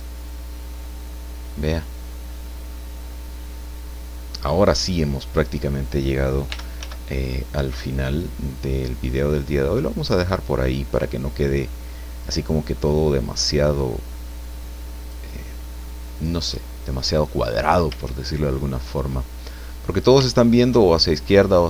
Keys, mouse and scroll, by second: 0.2-5.2 middle drag, 6.5 r, 6.8 z, 10.0 click, 11.6-12.6 middle drag, 13.3-15.3 drag, 15.5 scroll down 2, 15.8-17.1 middle drag, 17.2 scroll up 2, 18.5-20.3 shift+drag, 20.3 shift+click.